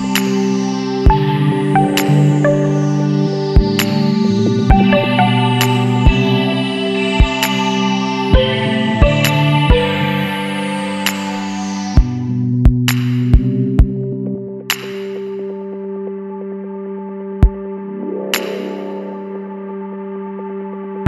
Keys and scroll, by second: 0.3-1.3 typing, 6.4 ctrl+k, 9.4 ctrl+g.